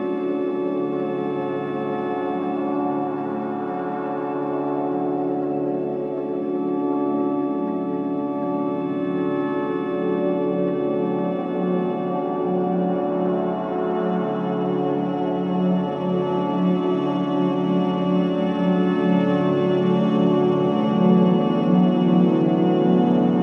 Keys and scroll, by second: 0.4 ctrl+z, 8.7 4, 15.3 3, 15.5 ], 17.0 b, 17.3 Return.